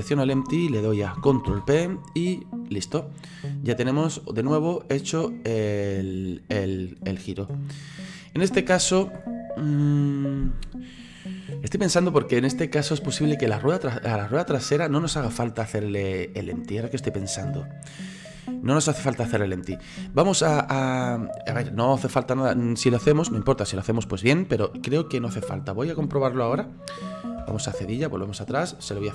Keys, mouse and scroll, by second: 1.5 ctrl+p, 3.3-4.1 middle drag, 4.1 right click, 5.1-8.8 drag, 8.8 ctrl+z, 27.5 /, 28.2-29.1 middle drag.